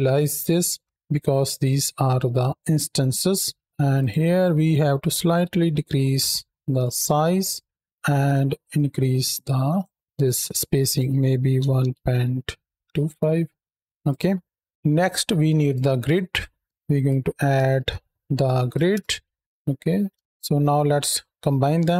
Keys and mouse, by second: 2.3 click, 3.1 middle click, 3.8-6.8 drag, 8.1-9.8 shift+drag, 10.7-13.0 drag, 13.9 click, 14.1 middle click, 16.3 shift+a.